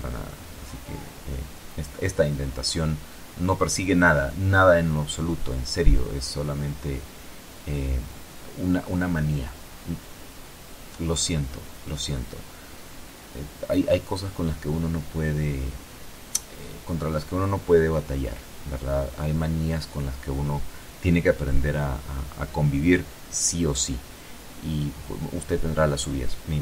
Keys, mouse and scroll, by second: 1.6 click, 2.9 KP_0, 7.3-10.0 middle drag, 10.0 click, 11.4 a, 12.2 alt+shift+click, 16.4 alt+shift+right click, 18.6 alt+shift+click, 19.8 alt+shift+click, 20.6 alt+shift+click, 22.2 a, 23.0 a, 23.8 alt+shift+right click, 25.7 click.